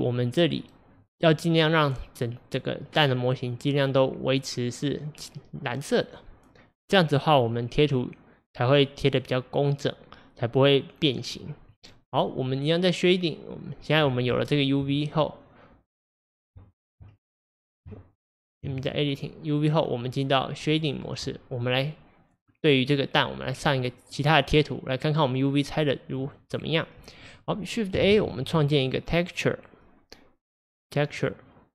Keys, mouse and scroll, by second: 14.4 Tab, 16.4 click, 18.6 Tab, 20.7 click, 23.0-31.7 drag.